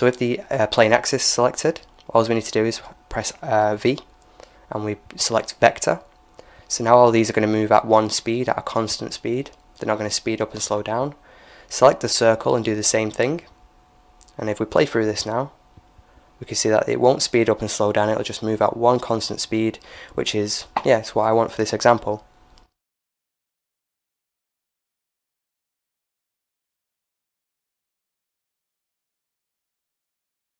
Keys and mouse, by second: 3.4 v, 9.2-11.0 right drag, 11.2 v, 14.4-16.2 drag, 15.5 alt+a, 22.3-23.8 drag, 23.8 middle click, 24.2-26.8 right drag, 27.5-29.4 drag, 30.3-30.5 drag.